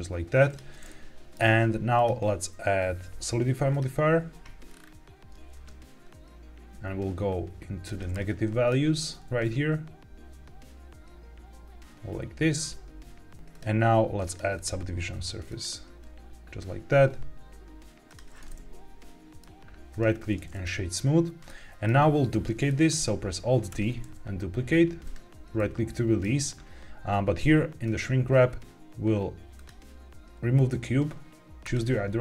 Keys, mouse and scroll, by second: 0.4 click, 0.8 middle click, 1.9-3.7 drag, 3.7 middle click, 4.6-5.5 scroll down 3, 5.6-7.8 shift+drag, 8.0-8.6 middle drag, 9.3-13.3 shift+drag, 13.4 click, 14.2 click, 14.5-15.5 drag, 18.0 click, 18.4 middle click, 19.8 right click, 21.4 middle click, 22.6 middle click, 23.7 alt+d, 25.0 right click, 25.5-26.1 middle drag, 27.7 click, 29.5 click, 31.5 click.